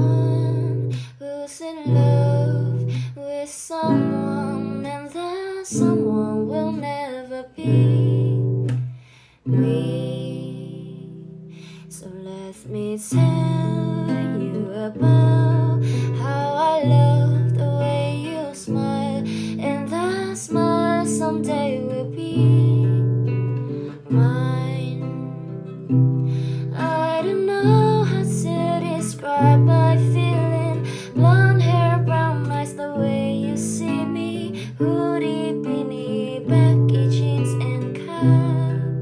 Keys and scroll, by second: 1.8-3.0 typing, 4.7 l, 6.3 Return, 7.2 ctrl+space, 9.5 e, 10.8 Return.